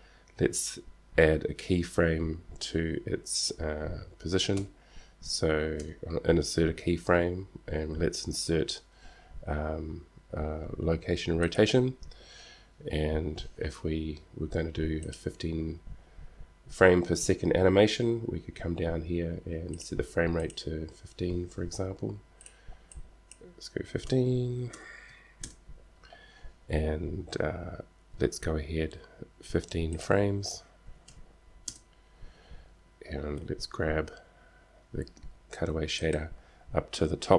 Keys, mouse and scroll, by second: 4.9 k, 5.9 i, 15.2-17.2 drag, 19.9-21.7 drag, 22.7-24.7 drag, 30.2-31.9 drag, 33.5 g.